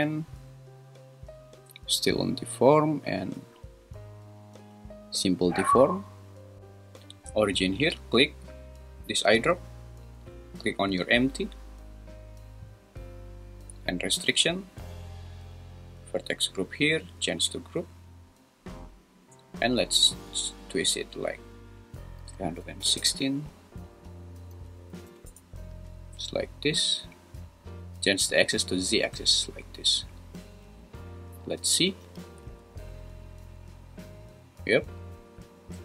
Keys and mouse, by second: 13.9 click, 16.9-18.0 drag, 20.0-21.4 drag, 22.2 3, 22.6 6, 22.8 0, 22.9 Return, 32.0 g, 32.4 z.